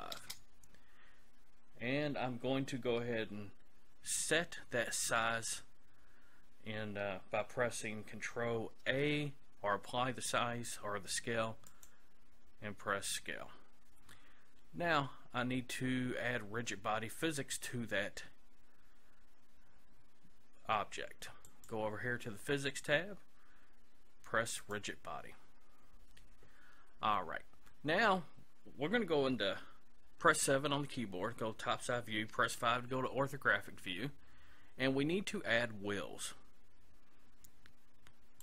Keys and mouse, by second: 8.8 ctrl+a, 21.5-23.4 drag, 24.6-26.2 drag, 26.3 click.